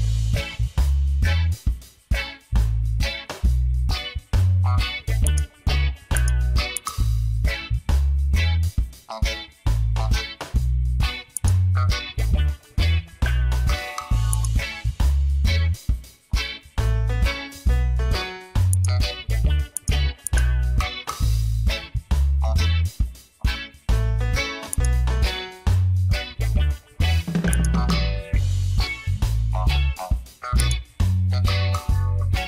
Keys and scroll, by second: 1.5 Left, 2.7 Return, 17.0 Return, 27.1 Return.